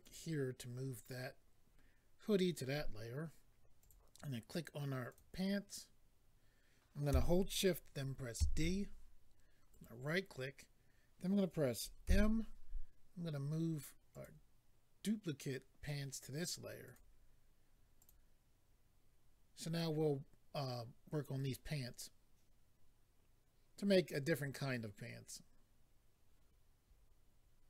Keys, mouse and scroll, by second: 0.0 click, 0.1 click, 3.8 click, 3.9 click, 5.1 click, 5.2 click, 9.7 right click, 11.0 right click, 14.1 click, 14.2 click, 16.8 click, 16.9 click, 18.0 click.